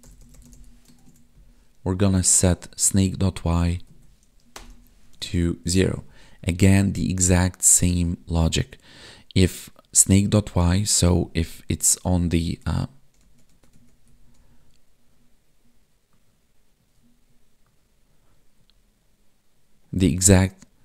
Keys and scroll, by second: 1.0 ctrl+s, 1.3 Left, 2.7 Up, 3.1 Down, 3.6 Right, 5.2 ctrl+s, 12.3 alt+Tab.